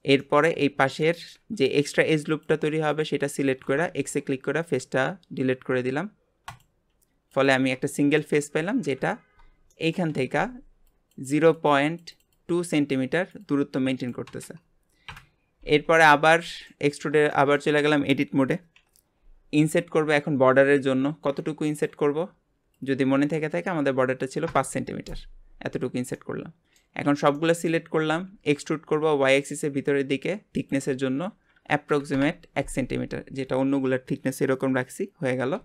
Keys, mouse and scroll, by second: 0.5 scroll up 1, 1.0 shift+middle click, 1.4 scroll up 2, 2.3 click, 2.9 alt+shift+click, 3.3 alt+shift+click, 3.9 x, 7.3 click, 7.7 scroll down 2, 8.0 shift+middle click, 8.3 Tab, 8.8 KP_Divide, 9.7-14.5 shift+middle drag, 15.1 KP_Divide, 15.7 Tab, 16.2 middle click, 17.0-17.3 scroll up 1, 17.3-20.0 shift+middle drag, 20.0 i, 22.7-25.8 drag, 26.1 middle click, 27.0 a, 27.4 middle click, 28.1 e, 30.6-33.7 drag.